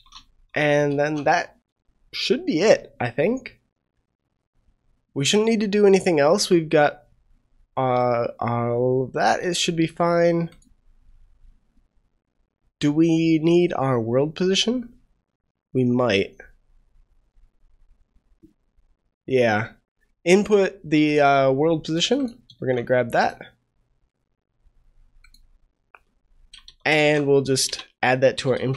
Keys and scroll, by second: 0.8 ctrl+s, 22.5 ctrl+c, 26.7 ctrl+v, 26.9 ctrl+v, 26.9 ctrl+s, 28.5 ctrl+s.